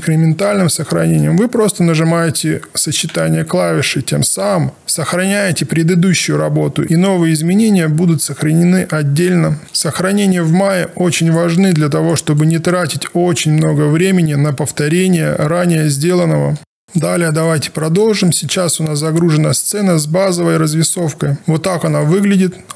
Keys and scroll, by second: 3.2 ctrl+alt+s.